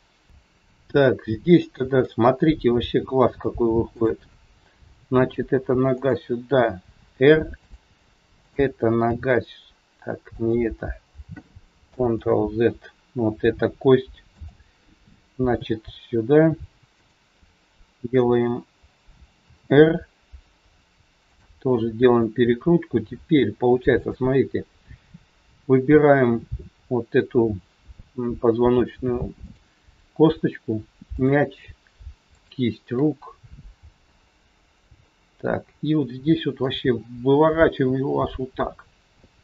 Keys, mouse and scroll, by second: 0.9-1.4 scroll up 2, 1.6 shift+middle click, 3.9 click, 4.9 g, 7.0 r, 8.3 click, 9.0 g, 12.1 ctrl+z, 14.3 click, 15.4 g, 20.7 r, 23.9 click, 24.9 scroll up 2, 27.0-28.3 scroll up 1, 29.4 shift+click, 33.6 shift+click, 33.6 scroll down 1, 34.0 middle click, 36.7 r.